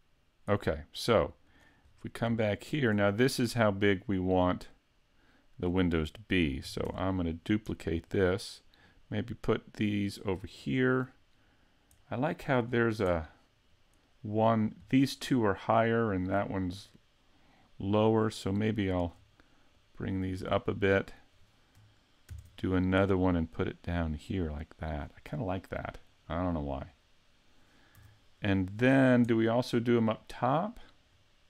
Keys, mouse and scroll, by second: 1.5 click, 1.9-2.3 scroll down 2, 2.4 shift+middle click, 4.2 click, 6.9 shift+d, 7.5 click, 8.1 click, 11.4 scroll down 3, 12.1 middle click, 12.7-13.2 scroll up 3, 13.2 middle click, 15.0 middle click, 18.2 shift+right click, 18.8 shift+right click, 19.8 click, 21.0 right click, 22.3 shift+d, 25.0 click, 26.9-28.0 scroll down 3, 28.0 a, 29.0-30.1 scroll down 2, 29.3 middle click, 30.3-31.1 scroll up 4, 31.1 scroll up 3.